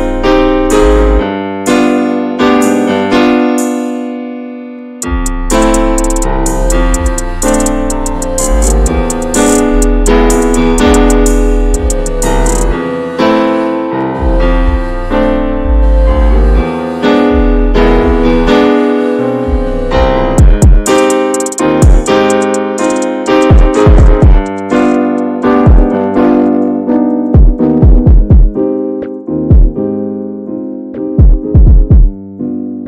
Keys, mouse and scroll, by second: 0.1 click, 0.5 shift+middle click, 1.0 ctrl+s, 1.3 click, 1.9 Tab, 2.4 a, 4.2 s, 7.0 Tab, 7.2 click, 7.7-10.5 shift+middle drag, 10.5 scroll up 1, 10.6 click, 10.9 Tab, 11.3-12.2 shift+middle drag, 12.2 a, 12.5 s, 16.1 Tab, 16.3 drag, 16.6 scroll down 2, 16.7-19.0 middle drag, 19.0 scroll down 1, 19.3 middle click, 19.7-21.0 scroll up 1, 21.0 a, 22.1 ctrl+j, 22.6 ctrl+a, 23.1 shift+middle click, 23.4 ctrl+s, 24.2 Tab, 24.5 a, 24.7 ctrl+s, 25.1 middle click, 25.2 scroll up 1, 25.3 click, 25.5 Tab, 25.9 middle click, 26.8 a, 27.1 alt+h, 28.2 click, 28.7 a, 29.2 a, 29.3-31.2 right drag, 31.2 scroll down 1, 31.5-32.6 middle drag, 32.6-32.8 scroll up 1.